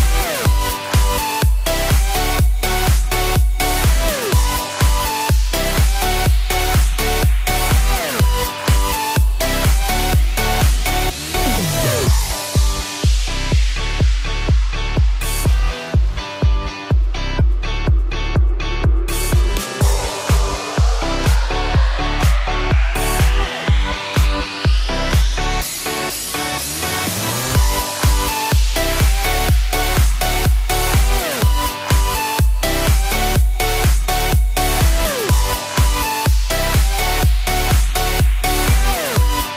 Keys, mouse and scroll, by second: 0.0 click, 0.1 click, 1.0 1, 1.4 ctrl+3, 2.2 scroll up 3, 2.6 shift+middle click, 3.4 r, 4.5 click, 4.7 g, 6.0 click, 7.6 ctrl+z, 8.6 Up, 9.6 Down, 10.6 scroll up 3, 12.4 click, 13.3 Delete, 13.4 Return, 14.3 Up, 15.3 ctrl+Up, 15.5 ctrl+v, 17.7 r, 18.9 click, 19.1-20.4 typing, 23.0 click, 23.1 click, 23.4 middle click, 24.8 middle click, 25.8 middle click, 28.0 middle click, 28.8 scroll up 1, 29.2 middle click, 29.8 shift+middle click, 30.2 middle click, 32.3 click, 33.5 shift+click, 34.1 middle click, 34.9 click, 36.4 c, 36.7 click, 37.7 Escape, 38.2 b, 39.0 click.